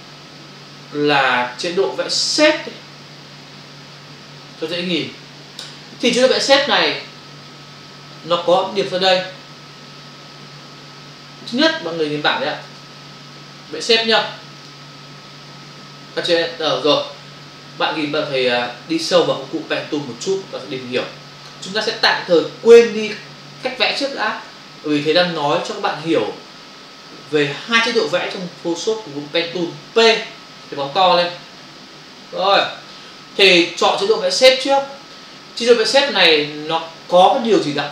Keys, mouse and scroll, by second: 1.9 click, 12.8 alt+Tab, 14.6 click, 16.3 Return, 18.2 f, 31.0 space, 31.0 ctrl+click, 33.3 click, 34.6 click.